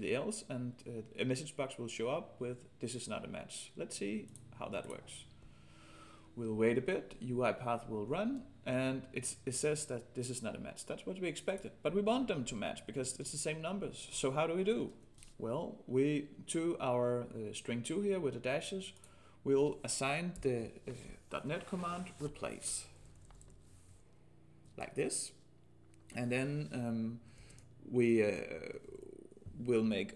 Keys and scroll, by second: 27.4 ctrl+space.